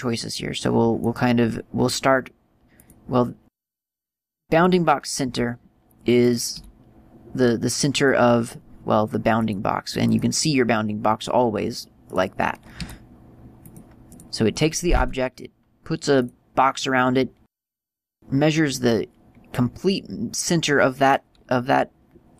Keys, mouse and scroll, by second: 1.2 click, 3.7 click, 6.5 click, 6.8 r, 8.3 click, 9.6 click, 12.3 right click, 13.0 r, 14.0 click, 14.3 right click, 15.2 r, 16.5 click.